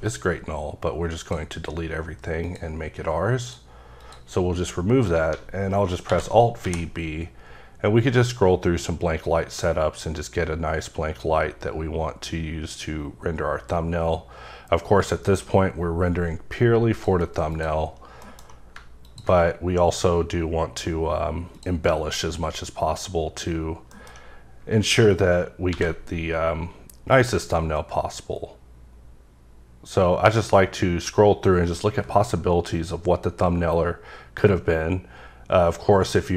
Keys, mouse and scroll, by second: 0.0 right click, 1.2 click, 2.4 click, 4.0 click, 6.0 v, 6.5 b, 7.1-8.0 scroll up 2, 9.2-10.9 scroll up 5, 10.9-11.5 scroll up 1, 11.5-12.4 scroll up 1, 12.5-12.8 scroll up 1, 13.4-14.6 scroll up 3, 14.6-15.1 scroll up 1, 15.1-15.8 scroll up 1, 15.8-16.9 scroll up 1, 16.9 click, 17.5 click, 18.2 alt+m, 19.0 ctrl+click, 19.5-20.9 scroll up 3, 20.9-21.5 scroll up 1, 21.5 click, 22.2 click, 23.9 m, 25.7 alt+v, 27.1 click, 27.6-28.3 scroll up 1, 28.3-28.6 scroll up 1, 29.4-30.6 scroll up 2, 30.6-33.5 scroll up 1, 33.5-34.2 scroll up 2, 34.2-34.7 scroll up 1, 35.0-35.7 scroll up 1, 35.7-36.1 scroll up 1.